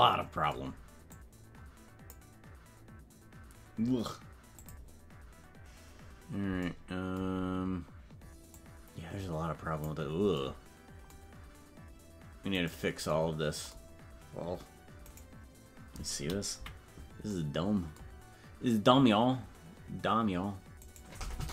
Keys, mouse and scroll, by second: 1.2-2.3 drag, 4.5 click, 7.4 scroll down 2, 8.5-9.8 drag, 12.6 right click, 15.1-16.6 right drag, 16.6 KP_Decimal, 18.7 scroll up 1, 20.9-21.5 right drag.